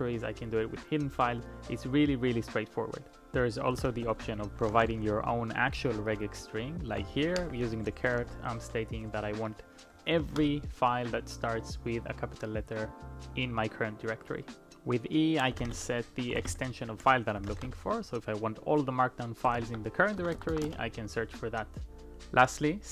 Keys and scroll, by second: 4.2 shift+6, 7.0 [, 7.4 shift+a, 8.2 shift+z, 9.1 ], 10.1 ', 10.4 Return, 15.3-18.0 typing, 19.6 ctrl+p, 20.2 BackSpace, 20.3 BackSpace, 20.5 BackSpace, 20.6 Return.